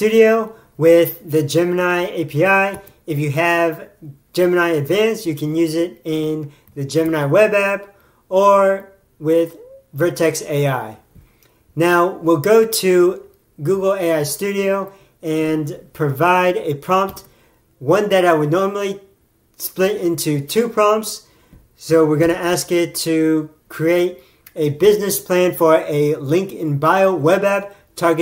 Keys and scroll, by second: 0.1 alt+<, 3.2 ctrl+Tab, 7.1 ctrl+Tab, 17.6 alt+>.